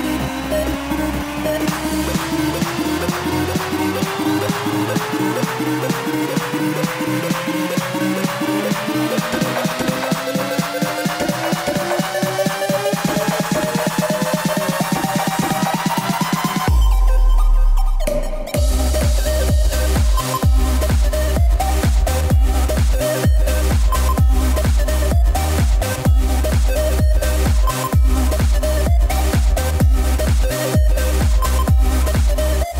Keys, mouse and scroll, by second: 2.3-6.9 drag, 8.8 click, 9.7 a, 14.7-19.2 drag, 19.2 i, 21.2-26.7 drag, 26.7 s.